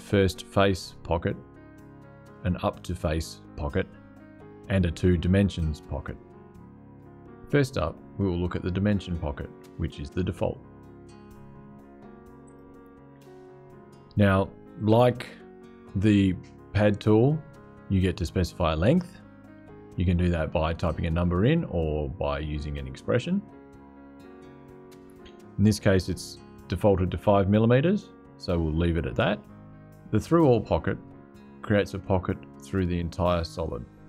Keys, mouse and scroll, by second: 12.1 click.